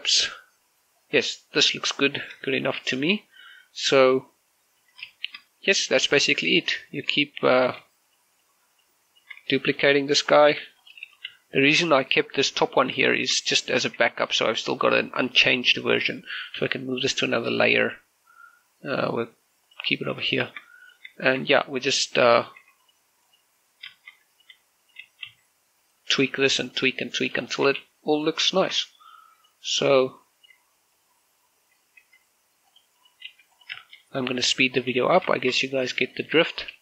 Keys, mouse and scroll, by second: 1.6 middle click, 2.6-3.0 scroll up 1, 3.0 scroll down 1, 3.3 shift+middle click, 3.8-5.6 middle drag, 5.6 z, 5.9 shift+middle click, 6.7-7.0 typing, 7.1 click, 7.7 shift+middle click, 8.9 shift+right click, 10.3 middle click, 11.3 shift+d, 11.6 click, 11.9 r, 12.1 z, 12.5 click, 12.8 middle click, 13.9 shift+middle click, 14.6-15.7 typing, 15.0 click, 16.5 right click, 17.4 m, 20.5 click, 21.1 shift+middle click, 21.6 right click, 22.0 shift+middle click, 22.3 scroll up 1, 23.1 Tab, 23.6 right click, 24.4 Tab, 24.7 shift+middle click, 25.1 right click, 25.3-28.6 typing, 25.6 right click, 26.2 scroll down 1, 26.6 click, 26.8 right click, 27.4 click, 28.1 click, 28.3 shift+middle click, 28.9 click, 29.3 shift+middle click, 30.2 right click, 30.5 middle click, 31.1 right click, 32.8 alt+s, 33.5 click, 33.8 right click, 34.1 alt+s, 34.3 click, 34.6 shift+middle click, 35.7 g, 35.9 click, 36.2 shift+middle click, 36.5 right click, 36.7 g.